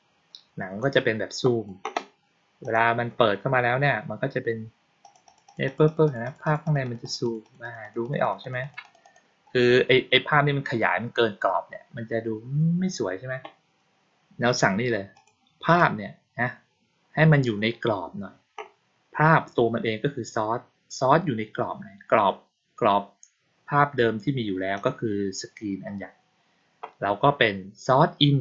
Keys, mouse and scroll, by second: 0.7-1.6 drag, 2.5 click, 4.9 click, 5.2 click, 5.4 click, 5.6 click, 5.8 click, 6.0 click, 6.1 click, 6.3 click, 6.5 click, 6.7 click, 6.9 click, 7.1 click, 7.3 click, 7.5 click, 7.7 click, 7.9 click, 8.1 click, 8.3 click, 8.5 click, 8.7 click, 8.9 click, 15.0 click, 15.6 click, 24.7 click.